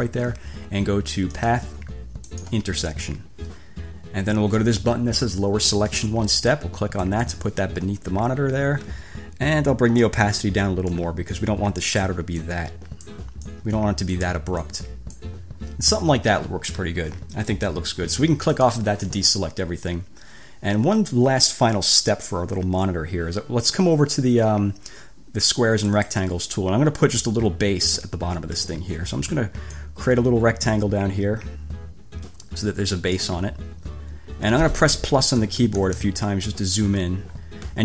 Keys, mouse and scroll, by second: 1.5 click, 2.5 click, 7.2 click, 10.2-11.4 drag, 11.6-12.4 drag, 12.7-13.5 drag, 13.7 click, 14.9 click, 18.8 click, 26.1 click, 29.9-33.6 drag, 35.6 =, 37.1-37.8 scroll down 4.